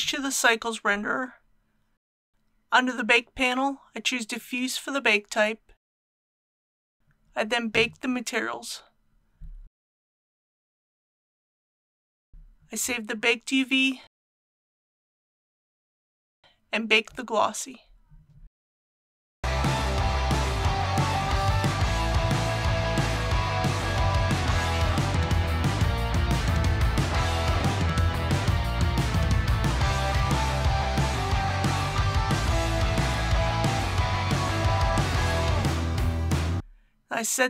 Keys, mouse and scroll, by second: 1.2 scroll down 1, 2.4 click, 5.6-6.6 scroll down 1, 8.8 click, 20.3 g, 21.4 b, 24.9-34.1 drag, 34.3 scroll down 1, 34.5 click.